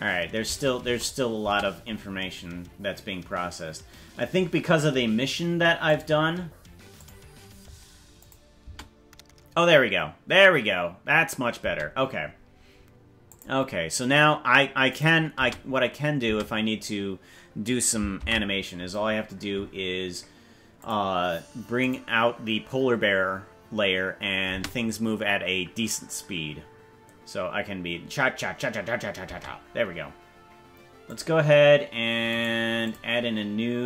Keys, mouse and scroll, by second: 0.6 space, 0.8 space, 1.6 space, 5.8 click, 7.0 click, 8.2 click, 8.6 space, 11.6 space, 13.3 click, 14.9 click, 15.4 space, 16.3 space, 20.2 ctrl+s, 20.7 click, 21.8 click, 24.6 space, 29.4 space, 31.1 click, 32.4 right click.